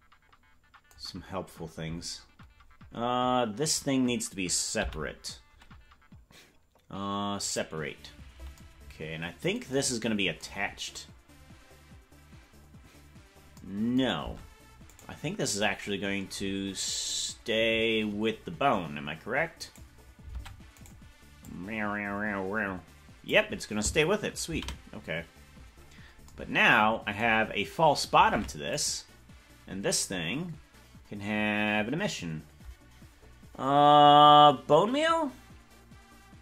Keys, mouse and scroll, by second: 8.5 p, 14.3 Tab, 15.0 right click, 16.5-17.9 scroll up 1, 17.9-19.7 scroll down 4, 19.7 right click, 20.4 ctrl+Tab, 21.4-23.3 drag, 25.5 ctrl+z, 27.4-28.4 scroll up 1, 28.4 ctrl+Tab, 28.4-28.8 scroll up 2, 28.8-31.3 right drag.